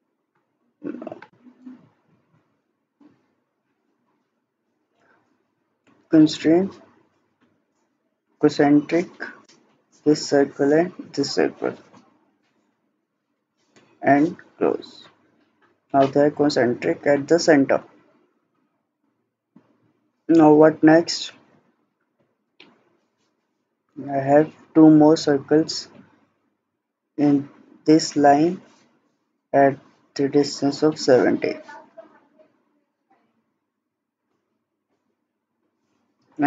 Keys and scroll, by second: 4.3 Escape.